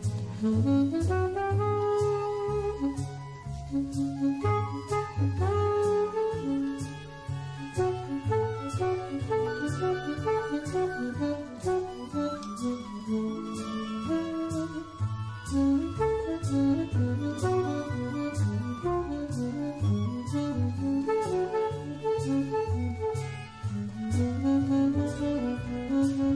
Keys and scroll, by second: 4.3 shift+super+g, 7.5-8.5 typing, 11.2 super+g, 13.0 super+x, 14.6 super+f, 15.4 shift+super+9, 17.0 9, 25.0-25.8 typing.